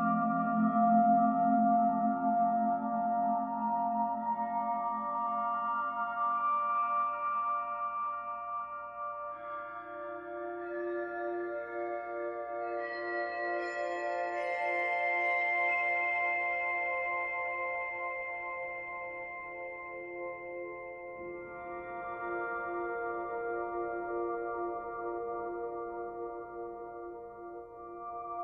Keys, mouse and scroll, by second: 5.0-8.0 scroll up 1, 9.1 click, 9.5 click, 10.5-11.2 scroll down 3, 11.2-13.5 scroll down 1, 15.4-16.3 scroll up 3, 16.3-17.3 scroll up 1, 17.3 click, 17.8 click, 18.1 click, 18.8 click, 19.2 click, 19.8 click, 20.3 click, 20.7 click, 21.0-23.0 right drag, 23.0 click, 23.8 click, 24.4 click, 25.9 click, 26.7 click.